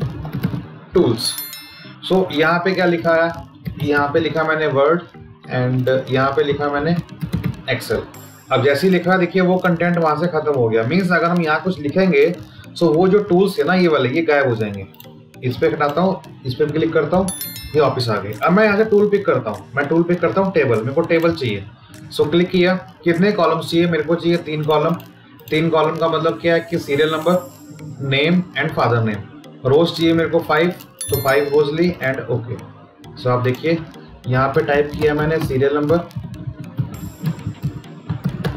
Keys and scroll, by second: 12.9 Delete, 17.0 Delete.